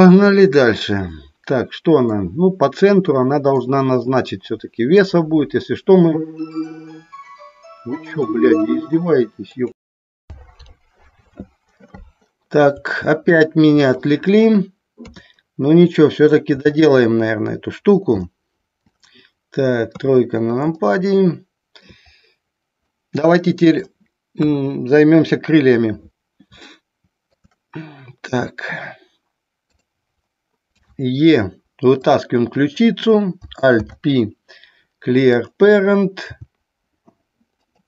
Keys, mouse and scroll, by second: 1.1 middle click, 3.5-5.0 middle drag, 13.1 middle click, 15.2 KP_3, 18.4 alt+middle click, 20.0 KP_3, 21.0-22.2 shift+middle drag, 23.2 middle click, 24.7 KP_1, 26.9 shift+middle click, 29.9 click, 32.9 click, 33.9 alt+p, 36.5 g.